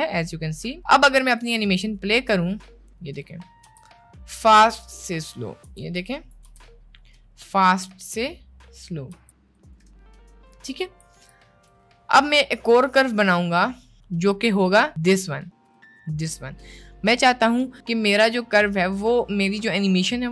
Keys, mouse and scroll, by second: 1.5-2.5 drag, 2.9-3.5 middle drag, 3.6 space, 5.6 space, 6.1 drag, 6.5 space, 9.3 space, 9.7 click, 9.9 space, 10.9 space, 11.4-11.7 drag, 12.8-14.1 drag.